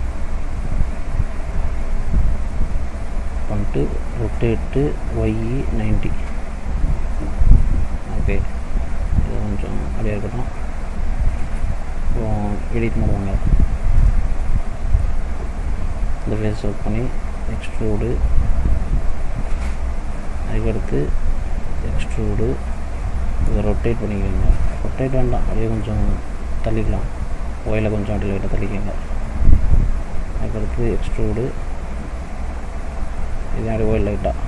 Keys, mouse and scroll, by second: 1.9 middle click, 3.2 middle click, 4.3 r, 7.3 middle click, 7.6-8.3 scroll up 5, 8.9 s, 10.7 click, 12.8 click, 13.8-14.6 scroll up 2, 14.7 shift+middle click, 15.5 click, 16.8 e, 20.9 e, 23.5 r, 25.6 middle click, 26.8 click, 27.7 click, 30.9 e, 33.9 click.